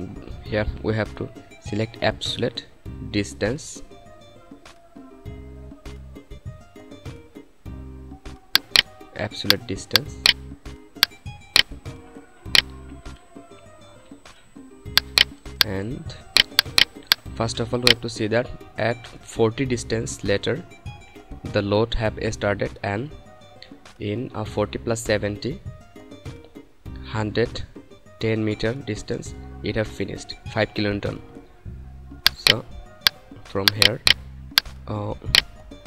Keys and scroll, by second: 35.6 4.